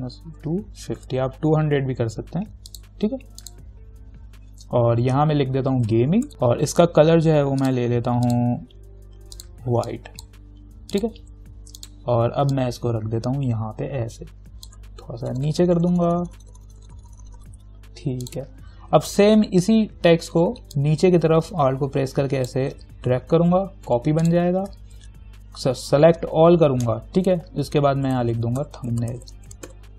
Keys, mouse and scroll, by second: 0.2-1.7 typing, 2.9 click, 5.8-6.8 typing, 7.8 ctrl+click, 8.8 ctrl+a, 9.6 click, 10.1-15.6 drag, 15.6 Down, 18.5 click, 20.9-24.1 alt+drag, 24.1 t, 24.5 click, 24.8 ctrl+a, 28.0-29.9 typing.